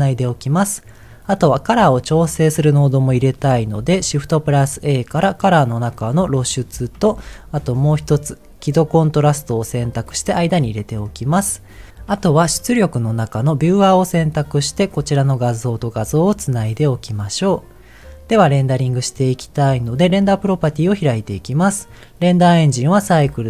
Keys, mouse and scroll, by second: 0.4-1.1 scroll down 1, 1.1 middle click, 3.8 shift+a, 7.0 shift+a, 10.8 middle click, 11.9 click, 12.2 shift+a, 15.4 click, 20.7-21.8 drag.